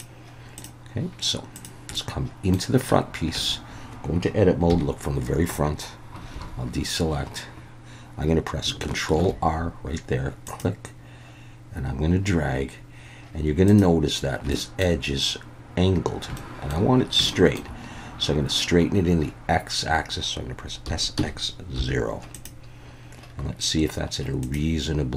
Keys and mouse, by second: 0.6 click, 1.5 click, 1.9-2.5 middle drag, 3.4 Tab, 4.7 KP_1, 6.3 alt+a, 9.2 ctrl+r, 13.6 click, 14.5 shift+middle click, 16.4 shift+middle click, 17.3 shift+middle click, 20.8 s, 21.2 x, 21.7 0, 22.3 click.